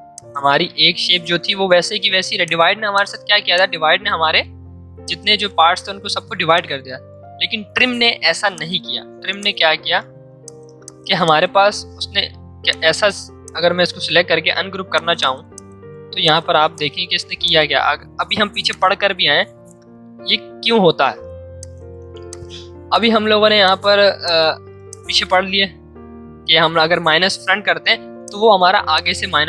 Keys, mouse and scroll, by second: 0.1 click, 1.9 ctrl+z, 2.4 click, 3.4 space, 3.5 click, 4.6 v, 5.0-8.2 drag, 8.2 z, 8.5 click, 9.3 space, 9.4 click, 10.1 v, 10.4 click, 12.2 ctrl+z, 12.6 click, 13.0 right click, 13.4 click, 13.8 right click, 14.9-21.4 drag, 21.6-29.4 drag.